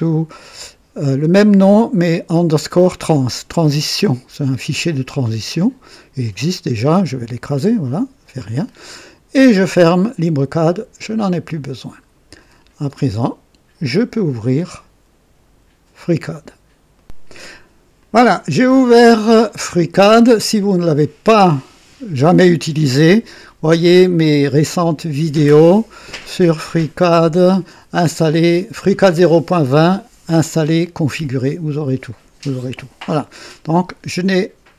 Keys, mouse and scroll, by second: 4.4 click, 6.2 click, 7.5 click, 11.2 click, 16.9 right click, 18.0 click.